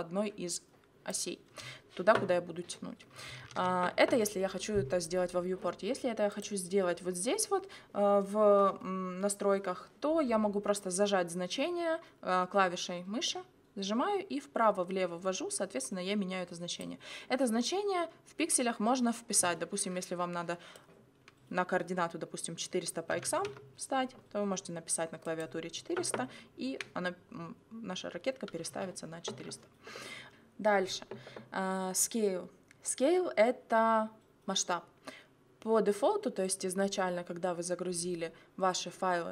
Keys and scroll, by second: 3.5 ctrl+z, 22.9-23.8 typing.